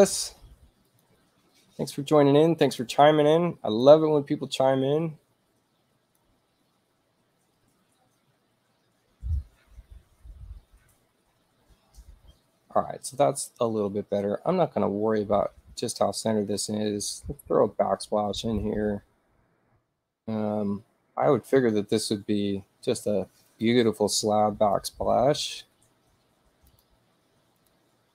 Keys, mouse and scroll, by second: 0.9 click, 2.6 click, 3.8-6.2 drag, 18.6 click, 23.5 click, 24.7 click, 26.7 click, 27.6 click.